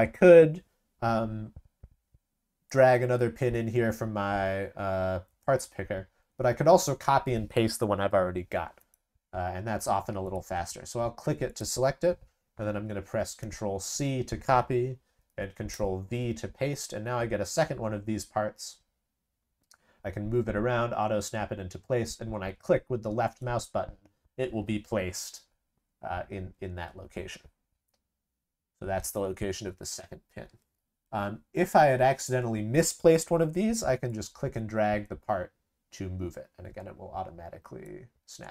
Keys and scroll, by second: 13.4 ctrl+c, 15.7 ctrl+v.